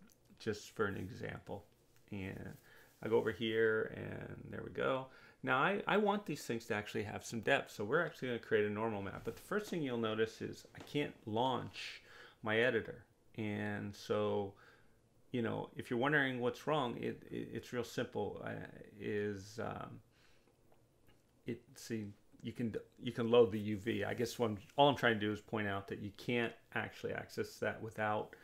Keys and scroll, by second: 18.4 space.